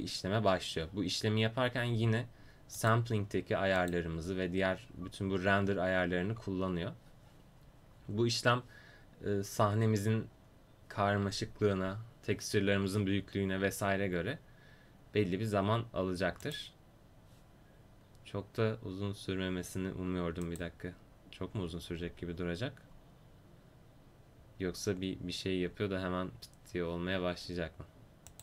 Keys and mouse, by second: 7.6-11.2 right drag.